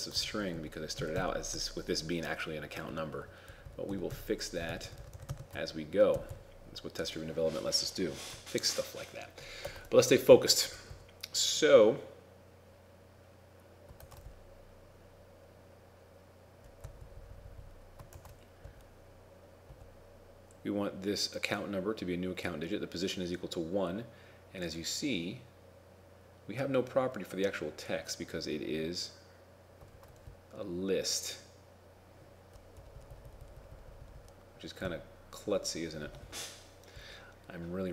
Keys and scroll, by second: 0.3 ctrl+shift+Right, 0.5 ctrl+shift+Right, 1.1 ctrl+shift+Right, 1.9 ctrl+shift+Right, 4.8 ctrl+shift+Left, 5.2 ctrl+shift+Left, 9.7 ctrl+Tab, 14.0 ctrl+Tab, 18.2 ctrl+Tab, 30.0 ctrl+Tab.